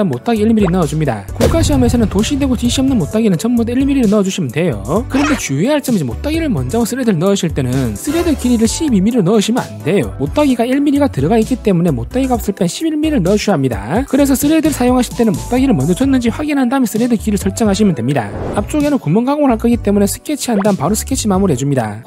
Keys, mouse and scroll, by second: 0.2 click, 1.3 click, 1.6 1, 2.3 click, 3.9-5.2 shift+middle drag, 15.2 click, 15.4 click, 18.9 click, 19.6 click, 20.0 s, 20.6 s.